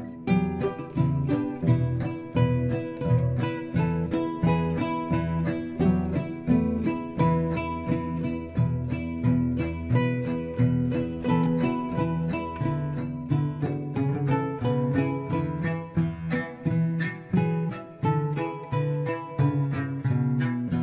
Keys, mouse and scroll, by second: 1.8-4.9 scroll down 1, 5.1-5.4 scroll down 3, 5.4-8.5 middle drag, 9.4-11.1 scroll down 2, 11.1-11.9 scroll down 1, 11.9-14.4 middle drag, 14.4-15.1 scroll up 3, 15.1-16.4 shift+middle drag, 16.4-16.9 scroll up 2, 16.9-19.3 middle drag, 19.3-20.8 drag.